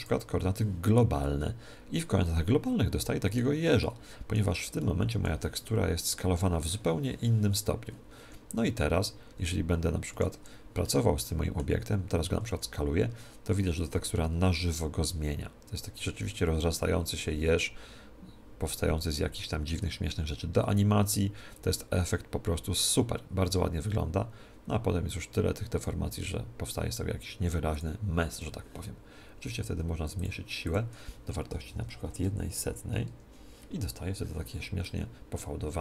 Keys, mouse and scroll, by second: 1.2-2.8 middle drag, 3.7-7.4 middle drag, 8.2 s, 10.8-13.7 middle drag, 12.4 s, 27.7-29.6 drag, 30.1-32.1 drag, 34.8-35.8 middle drag.